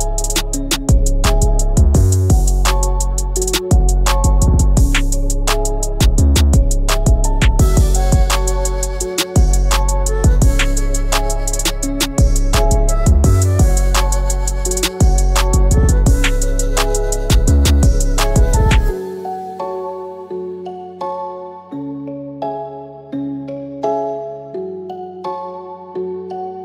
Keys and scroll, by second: 22.1 |.